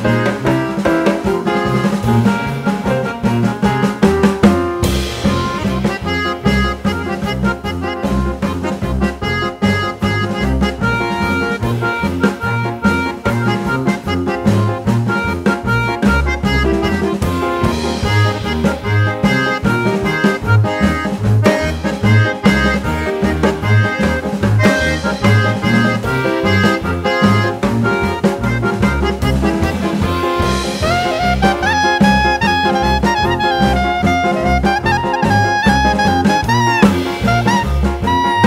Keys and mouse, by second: 0.0-2.0 drag, 3.0 shift+click, 3.5 g, 4.2 shift+click, 4.5 shift+click, 5.0 shift+click, 5.3 shift+click, 5.8 click, 6.2 g, 6.7 shift+click, 7.0 shift+click, 7.8 click, 8.1 click, 8.3 click, 8.7 shift+click, 9.2 g, 9.8 shift+click, 10.2 shift+click, 10.7 shift+click, 11.0 shift+click, 11.5 click, 11.8 click, 12.0 g, 12.5 shift+click, 12.9 shift+click, 13.5 click, 13.8 click, 14.1 click, 14.5 shift+click, 15.0 g, 15.4 click, 15.5 shift+click, 15.8 shift+click, 16.4 shift+click, 16.8 shift+click, 17.5 click, 17.9 g, 18.5 shift+click, 18.8 shift+click, 19.6 click, 19.8 click, 20.2 click, 20.4 click, 20.7 shift+click, 21.2 g, 21.8 shift+click, 22.2 shift+click, 22.8 shift+click, 23.1 shift+click, 23.6 click, 23.9 click, 24.1 g, 24.7 shift+click, 25.0 shift+click, 25.6 click, 26.1 click, 26.5 shift+click, 26.9 g, 27.5 shift+click, 27.9 shift+click, 28.5 shift+click, 28.8 shift+click, 29.3 click, 29.6 click, 29.9 g, 30.4 shift+click, 30.8 shift+click, 31.3 click, 32.0 click, 32.2 click, 32.5 shift+click, 33.0 g, 33.7 shift+click, 34.1 shift+click, 34.6 click, 34.7 shift+click, 35.1 shift+click, 35.6 click, 36.2 g, 36.5 shift+click, 36.9 shift+click, 37.5 click, 38.2 click, 38.4 click.